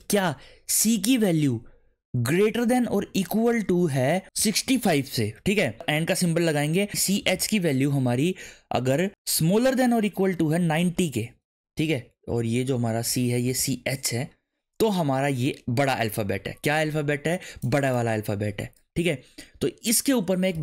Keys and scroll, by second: 0.0-0.8 typing, 2.4 shift+., 3.0 =, 4.4 6, 4.7 5, 6.5-7.8 typing, 9.3-11.6 typing, 13.1-14.1 typing, 20.5 shift+9.